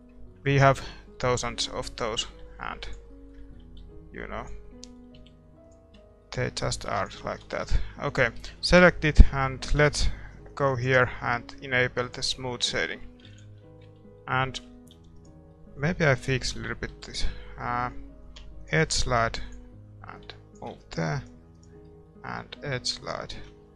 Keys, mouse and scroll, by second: 1.4-3.4 middle drag, 2.3 g, 3.8 g, 5.2 g, 5.9 Tab, 5.9-10.5 middle drag, 6.7 a, 7.2 ctrl+s, 7.2-13.8 drag, 8.1-10.5 right drag, 12.5-18.6 middle drag, 12.7 a, 13.6 ctrl+s, 14.0 Tab, 14.9 a, 15.1-18.6 right drag, 18.6 ctrl+e, 20.2-23.1 drag, 20.8 a, 21.1-23.5 right drag, 21.8-23.7 middle drag, 23.1 ctrl+e.